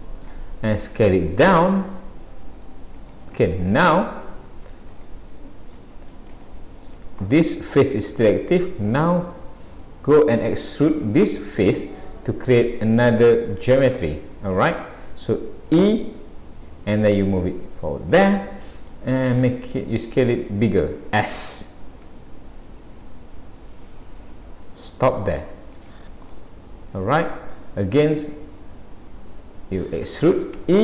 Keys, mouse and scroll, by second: 1.0 s, 3.4 shift+middle click, 4.6-5.0 scroll up 3, 5.0 shift+middle click, 7.0 shift+middle click, 7.3 middle click, 8.4-9.0 scroll down 2, 9.0 middle click, 10.4-11.2 scroll up 2, 26.3 middle click.